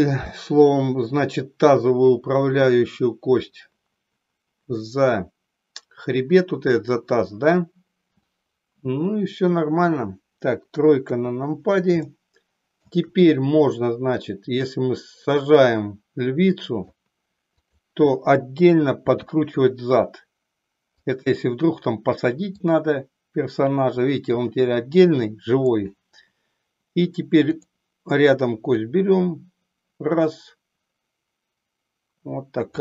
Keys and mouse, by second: 11.0 KP_3, 12.1-13.0 shift+middle drag, 14.1-17.1 drag, 17.6 click, 19.2 r, 21.2 click, 22.6-25.8 drag, 27.5 click, 28.7-32.8 drag.